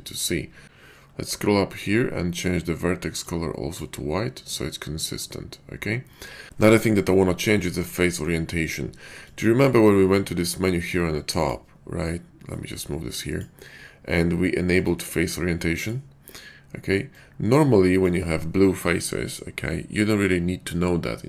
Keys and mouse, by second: 9.3 click, 11.2-14.7 drag, 14.8-17.3 drag.